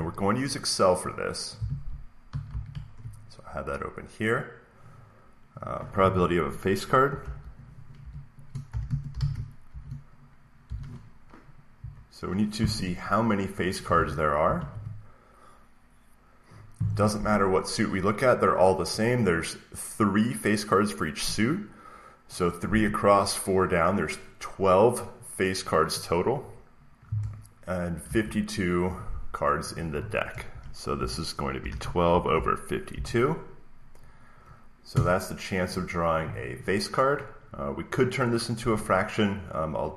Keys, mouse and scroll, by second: 1.4 click, 1.6 alt+Tab, 2.2 alt+Tab, 2.4 alt+Tab, 5.5-9.0 drag, 7.1-10.5 typing, 11.7 BackSpace, 13.4 click, 13.8 alt+Tab, 14.3 alt+Tab, 27.9 alt+Tab, 30.8-32.8 typing, 34.8 Return.